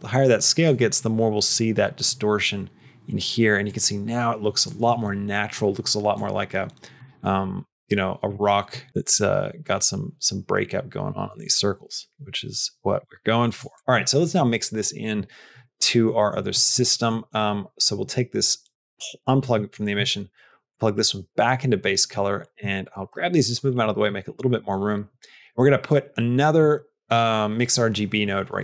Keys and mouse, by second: 3.6 click, 6.0 click, 7.3 click, 8.9-13.4 shift+drag, 13.6 click, 13.9 middle click, 15.9 middle click, 16.3 middle click, 16.8 middle click, 17.4 click, 19.1 click, 19.4 middle click, 20.6 click, 21.6 middle click, 22.3 click, 22.7 shift+click, 23.0 g, 26.6 middle click.